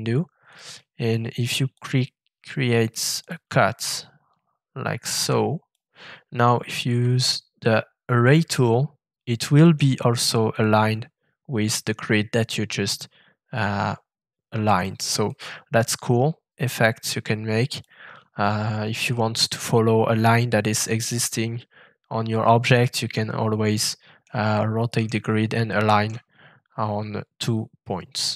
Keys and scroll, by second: 6.8 a.